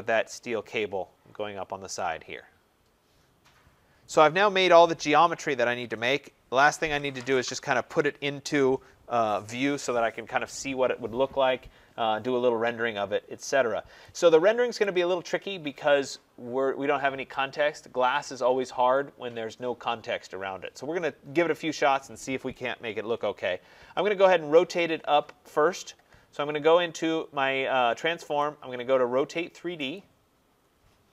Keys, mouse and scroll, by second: 1.2 scroll, 3.9 right click, 11.5 middle click, 11.6 middle click, 14.7 right click, 24.4 click, 28.2 click, 29.8 click, 30.4 middle click, 30.5 middle click, 30.5 middle click.